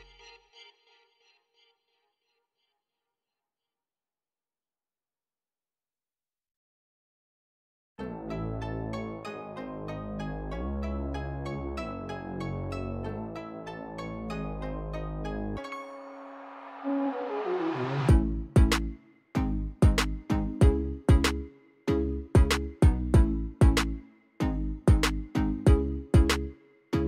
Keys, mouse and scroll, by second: 1.4 click, 10.0 click, 11.8 click, 12.7 KP_1, 12.9 KP_0, 13.5 KP_8, 13.7 KP_0, 14.0 Return, 19.6 click, 26.3 click.